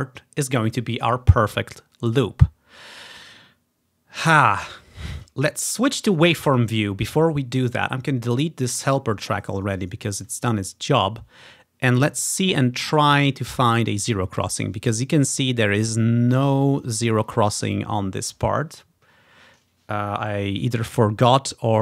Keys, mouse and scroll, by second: 5.7-6.7 drag, 8.3 click, 9.8 click, 11.1-11.8 ctrl+scroll up 3, 12.3 scroll up 3, 13.3 scroll up 1, 13.6-14.5 scroll down 2, 15.0-15.4 scroll down 1, 17.0 ctrl+scroll up 2, 19.0 ctrl+scroll up 2.